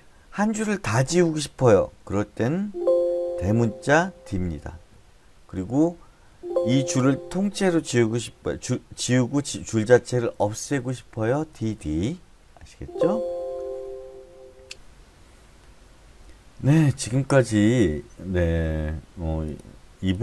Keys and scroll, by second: 2.6 Escape, 4.0 typing, 6.3 Escape, 11.5 d, 11.7 d, 12.7 Escape.